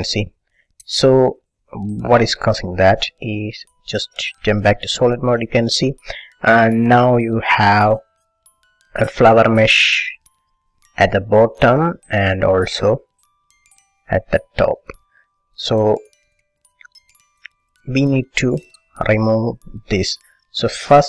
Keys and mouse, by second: 3.5 click, 4.6 click, 5.4-8.4 middle drag, 11.6-12.6 middle drag, 12.8-18.2 middle drag.